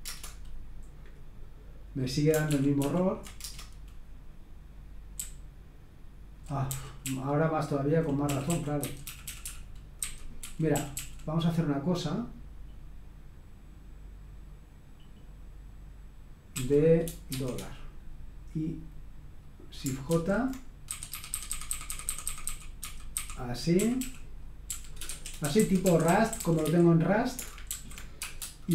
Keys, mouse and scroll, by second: 0.6-1.3 typing, 2.5 ctrl+p, 2.8 ctrl+p, 3.4 Return, 5.1-11.2 typing, 16.5-17.3 typing, 20.1-28.7 typing.